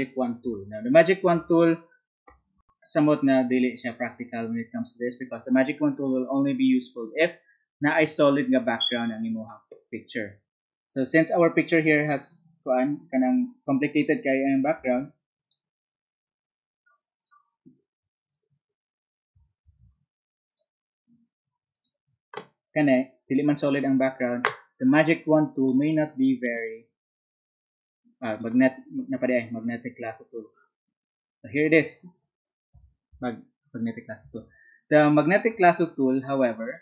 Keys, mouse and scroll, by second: 25.9 ctrl+right click.